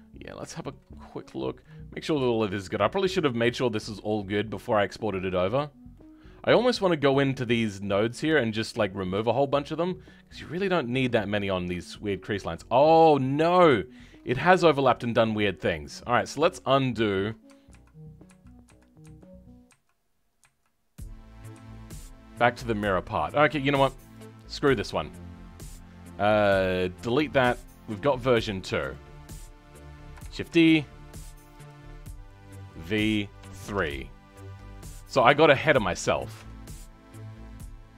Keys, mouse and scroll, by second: 17.6 ctrl+z, 18.2 ctrl+z, 24.9-26.9 drag, 26.9 Delete, 28.3-30.2 drag, 30.2 shift+d, 31.5-35.3 drag, 35.3-36.3 scroll up 2, 36.3 Tab.